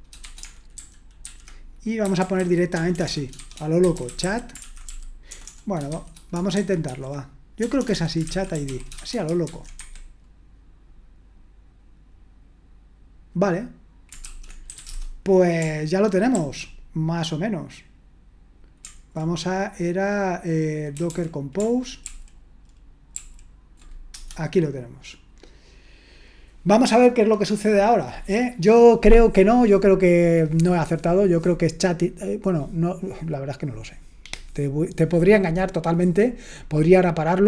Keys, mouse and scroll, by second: 0.0-9.9 typing, 14.4-15.6 typing, 16.3 ctrl+r, 21.8-22.5 typing, 23.1 ctrl+r, 24.1 Return.